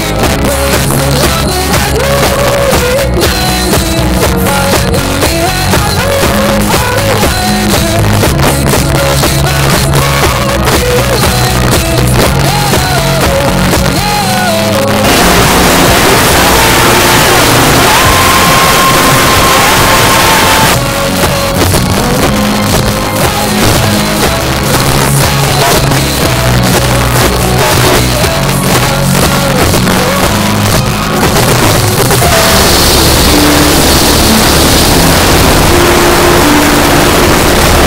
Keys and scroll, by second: 0.1 Up, 0.2 Up, 0.4 Up, 0.5 Up, 0.7 Up, 0.8 Up, 1.0 Up, 1.2 Up, 1.5 Up, 1.7 Up, 2.2 e, 20.7 Page_Down.